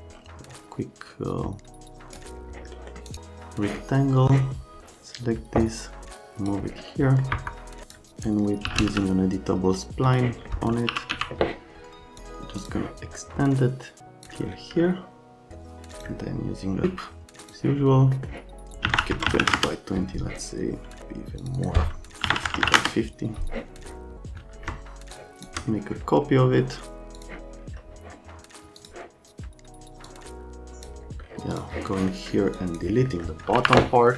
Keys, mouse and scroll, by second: 2.7 right click, 3.1 scroll up 2, 4.8-6.0 drag, 7.0 middle click, 7.3 F3, 7.8 click, 8.4-9.2 typing, 10.4 Pause, 10.6-11.6 typing, 16.8 s, 17.4 click, 18.1 right click, 18.8-19.3 typing, 19.1 Tab, 19.5 Return, 21.4 right click, 21.5 right click, 22.2 KP_5, 22.3 KP_0, 22.4 Tab, 22.5 KP_5, 22.6 KP_0, 22.7 KP_Enter, 25.1 shift+Home, 27.2 Home, 28.8 click, 30.0 click, 31.5 click, 31.9 right click, 32.5 click, 33.0 right click, 33.6 Delete, 33.9 right click.